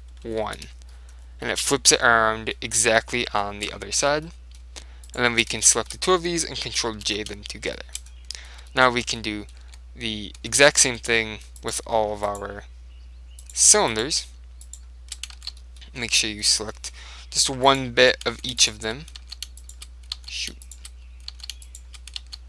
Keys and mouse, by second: 1.3-7.5 middle drag, 5.2-6.9 right drag, 7.1 ctrl+j, 7.8-9.1 middle drag, 9.7 Tab, 10.5 Tab, 10.8-16.2 right drag, 11.0 Tab, 15.5 ctrl+z, 15.7-18.5 middle drag, 16.2 click, 17.7 click, 18.4-22.4 right drag, 18.4 ctrl+z, 19.3 ctrl+z, 20.2 ctrl+z, 21.4 ctrl+z, 22.3 ctrl+z.